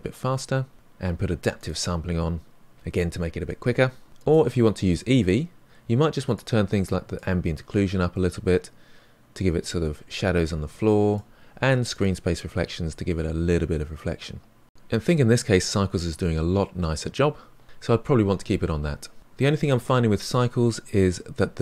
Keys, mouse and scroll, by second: 4.9-6.3 drag, 7.9-10.7 drag, 11.9 click, 13.1-15.0 middle drag, 15.0 click, 16.5-18.8 drag, 19.6-21.6 middle drag.